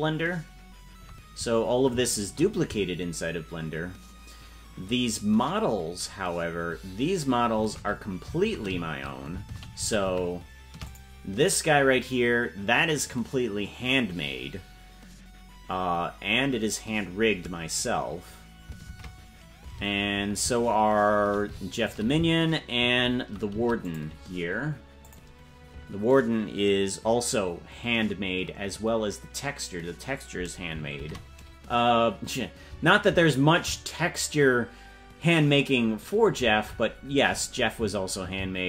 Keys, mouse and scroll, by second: 6.1-9.3 shift+middle drag, 11.5-14.5 right drag, 18.9 shift+`, 25.2 click, 30.9 shift+`, 34.1 shift+`.